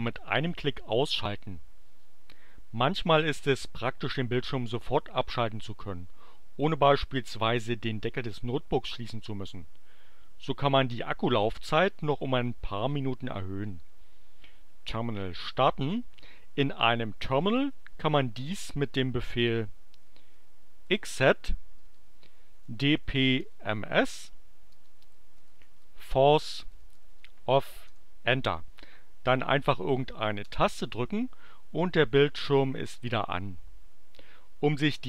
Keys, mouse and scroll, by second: 15.8 click, 19.8-27.4 typing, 27.8 Return, 30.4 space.